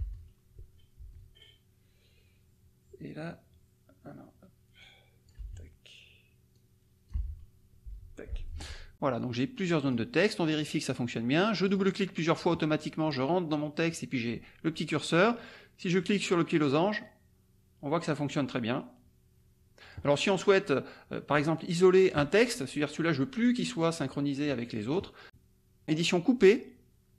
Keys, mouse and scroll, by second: 9.6 click, 10.5 click, 11.6 click, 16.5-20.1 drag, 21.3 click, 24.0-25.1 drag, 25.2 click, 26.5 click.